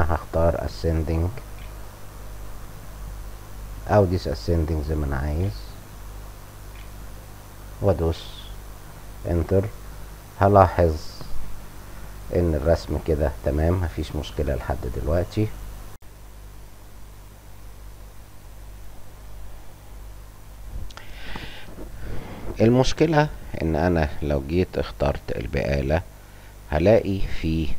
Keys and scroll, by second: 0.1-1.4 typing, 5.3-6.6 typing, 8.0 Return.